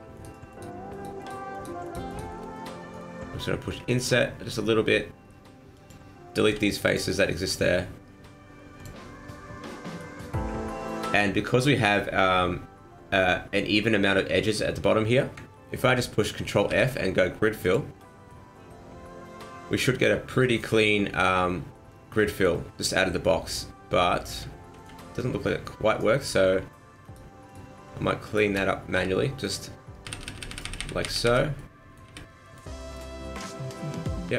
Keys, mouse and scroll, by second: 0.1 shift+right click, 0.5 shift+right click, 0.9 shift+right click, 1.2 shift+right click, 1.5 shift+right click, 1.8 shift+right click, 2.1 shift+right click, 3.7 i, 6.5 x, 8.7 click, 9.8 alt+right click, 16.7 ctrl+f, 18.3 middle click, 21.7 middle click, 23.2 middle click, 24.7 ctrl+z, 26.2 right click, 26.2 m, 27.0 shift+right click, 27.5 right click, 28.3 shift+right click, 28.9 f, 29.4 right click, 30.1-30.8 f, 31.0 f, 31.3 f, 31.5 middle click, 32.1 f, 32.4 middle click, 32.8 shift+middle click, 33.1 middle click.